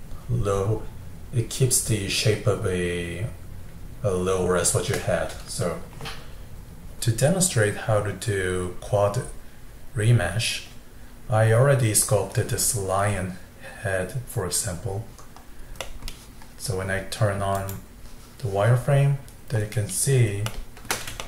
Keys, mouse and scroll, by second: 3.9-7.0 middle drag, 7.0-8.8 drag, 15.8-17.5 middle drag, 17.5 click, 19.6-20.5 scroll up 3, 20.5-21.2 shift+middle drag.